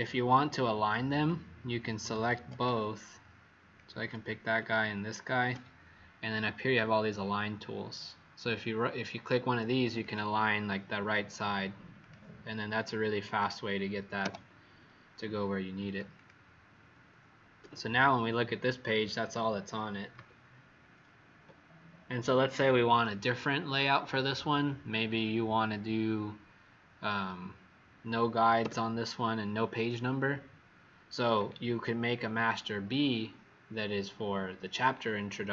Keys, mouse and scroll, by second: 1.2 click, 2.2 Escape, 3.7 click, 4.6 shift+click, 9.9 click, 13.2 click, 14.2 Delete, 15.8 click, 16.1 click, 17.5 w, 20.7 alt+scroll up 1, 28.5 w, 31.8 alt+scroll down 1.